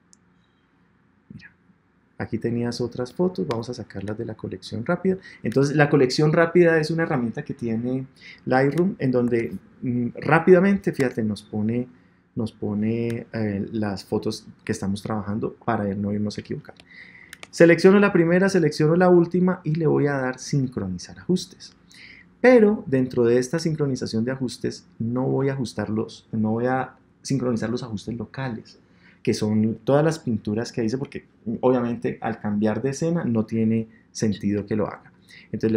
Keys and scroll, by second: 9.2 Tab, 10.9 Tab.